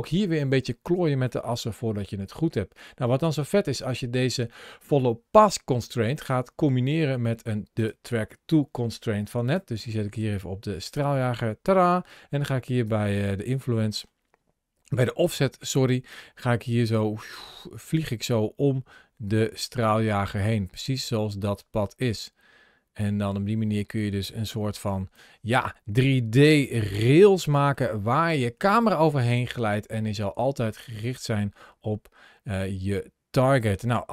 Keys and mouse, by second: 1.2 middle click, 3.0-7.7 drag, 12.7-25.0 drag, 12.7-17.0 middle drag, 26.4 shift+middle click, 26.9 middle click, 27.4 shift+middle click, 28.2 middle click, 30.2-34.1 drag.